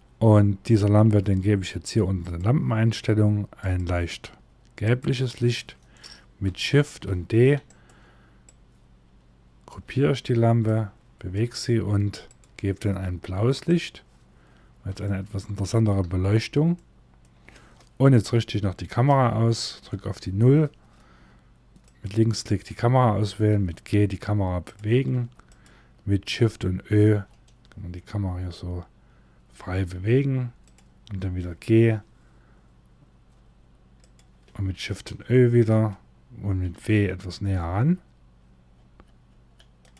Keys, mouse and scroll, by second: 1.7 click, 6.6 shift+d, 8.0 click, 13.9-14.5 scroll up 1, 14.5 scroll up 1, 14.6 shift+middle click, 15.6 scroll up 1, 16.4 middle click, 18.6 KP_0, 20.8-21.4 scroll up 1, 23.0 g, 24.7 g, 26.5 shift+`, 31.1 g.